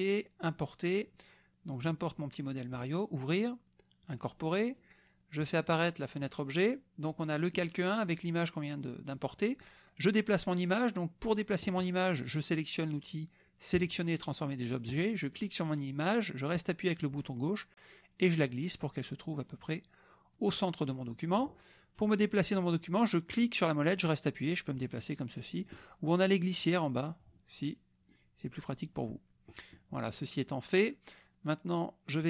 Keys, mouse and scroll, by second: 0.5 click, 1.8 click, 2.7 click, 4.1 click, 5.6 click, 6.2 click, 13.7 click, 15.3-21.6 drag, 23.8-25.9 middle drag, 26.6 click, 28.1-29.1 drag, 29.1-32.2 middle drag.